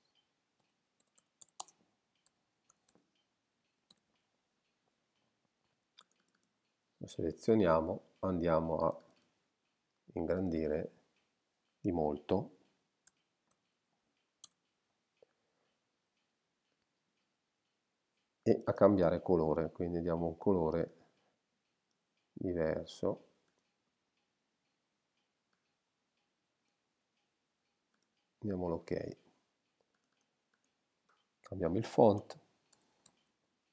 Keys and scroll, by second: 0.4-3.9 typing, 13.1 shift+2, 13.5 shift+0, 14.4 shift+Return, 32.2 shift+p, 32.8 shift+a, 33.1 shift+s.